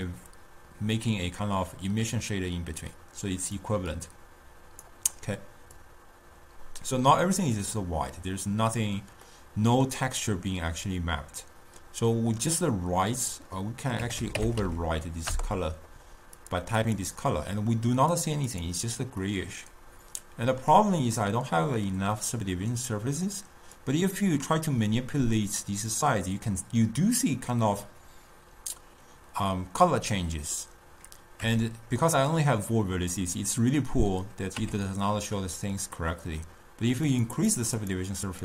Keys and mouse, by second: 3.8-9.0 drag, 10.0-12.7 middle drag, 13.5-16.7 drag, 17.0 click, 18.7 click, 19.9-24.0 middle drag, 24.0-27.2 drag, 31.7 Tab, 35.2 Tab, 37.3-38.4 drag.